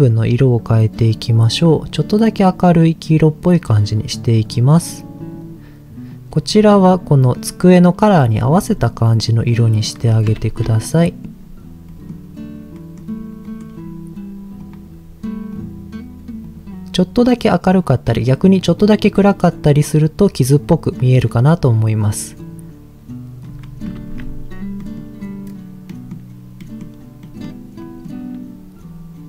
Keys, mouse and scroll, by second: 0.0 click, 0.0 scroll up 1, 8.3-9.3 scroll down 5, 9.5 middle click, 10.4 ctrl+s, 10.9 middle click, 11.3 scroll up 3, 11.9 middle click, 12.7 middle click, 13.5 middle click, 14.6 click, 23.4 click, 23.6 scroll down 2, 24.0 ctrl+s, 24.8 middle click, 25.8 middle click, 26.6 middle click, 27.2 middle click, 27.8 middle click, 28.8 scroll up 1.